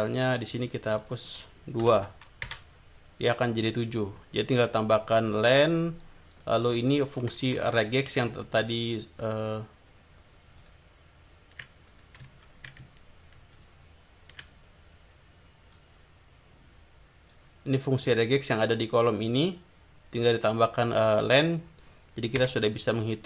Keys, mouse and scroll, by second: 0.1 click, 1.0 click, 1.8 BackSpace, 2.4 Return, 3.7 click, 6.4 click, 7.5 Left, 10.6 ctrl+click, 11.9 ctrl+click, 13.5 ctrl+click, 15.7-17.5 drag, 22.4 Return.